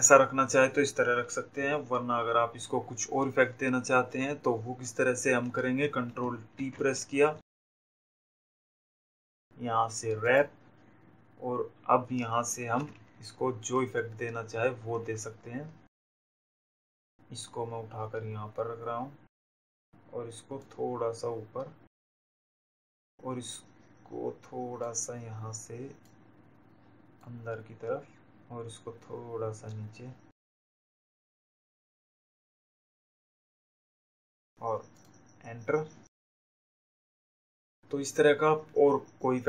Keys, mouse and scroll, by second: 9.1 right click, 10.8 click, 14.0 Down, 17.1 click, 20.2 click, 22.9 click, 25.9 click, 28.8 click, 36.0 click.